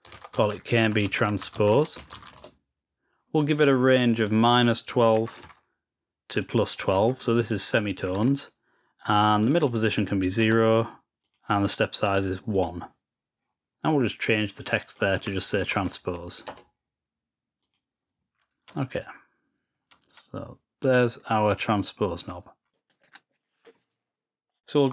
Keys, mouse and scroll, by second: 4.2 click, 6.3 click, 7.4 click, 9.3 click, 9.5 click, 9.7 click, 11.1 click, 12.4 click, 14.6 click, 17.5 click, 18.8-19.8 ctrl+scroll up 3, 20.7 click, 21.4-22.9 drag, 23.0 click, 23.0 click.